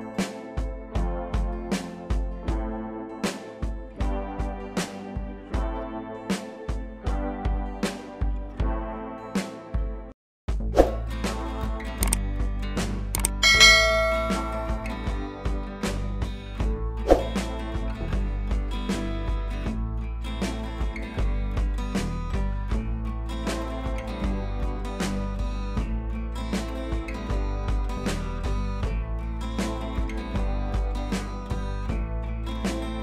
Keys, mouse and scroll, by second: 0.6 ctrl+a, 1.7 ctrl+d, 2.3 ctrl+z, 3.8 ctrl+t, 4.3 right click, 5.1-5.9 click, 7.3 scroll up 1, 7.5-8.0 scroll down 1, 9.5 scroll down 1, 9.7 ctrl+j, 10.1 click, 12.2-13.1 scroll down 1, 13.7 scroll down 1, 15.3 click, 18.8 click, 20.9 ctrl+j, 22.9 click, 25.1 click.